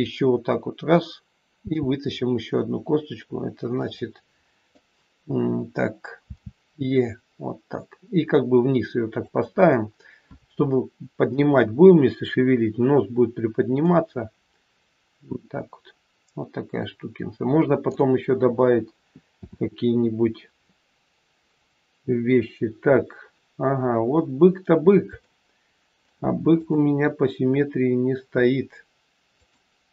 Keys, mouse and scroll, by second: 1.6 r, 6.2 e, 13.7 middle click, 19.2 KP_7, 20.6 scroll down 2, 22.4-23.0 scroll down 1, 23.9-24.6 scroll down 2, 24.6 scroll up 1, 25.3 shift+middle click, 26.5 click, 29.3 click.